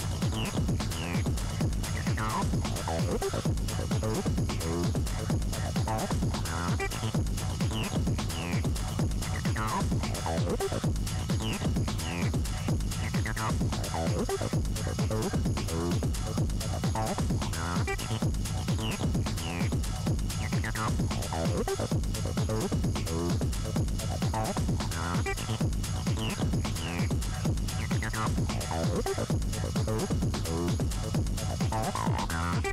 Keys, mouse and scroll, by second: 1.0-3.6 scroll down 10, 3.6-4.5 scroll down 2, 4.5 scroll down 1, 5.4-8.1 drag, 11.5 click, 12.7 Tab, 13.1-13.5 scroll up 3, 13.5 scroll down 3, 13.9 shift+middle click, 14.7 n, 15.4 Tab, 15.7 Tab, 16.0-18.4 middle drag, 18.4 click, 19.2-19.7 scroll down 1, 19.7 scroll up 1, 20.0 middle click, 20.3 scroll up 2, 20.6 shift+middle click, 21.0 scroll up 1, 22.7 3, 23.2 click, 24.3 shift+click, 24.7 shift+click, 25.1 shift+click, 25.5 scroll down 1, 26.1 e, 31.1-31.8 scroll down 5, 31.8 middle click, 32.4-32.7 scroll up 3.